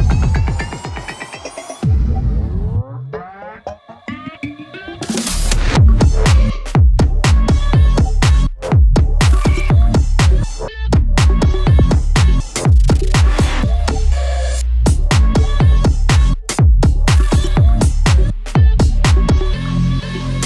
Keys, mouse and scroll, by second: 2.7-5.0 drag, 5.0-17.1 drag, 17.1-20.4 ctrl+drag.